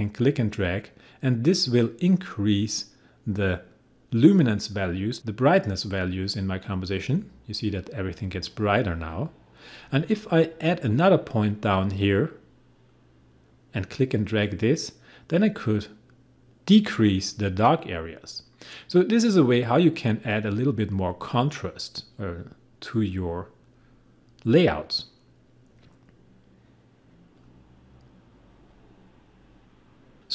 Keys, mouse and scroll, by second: 12.9-23.8 drag, 24.2-30.3 drag.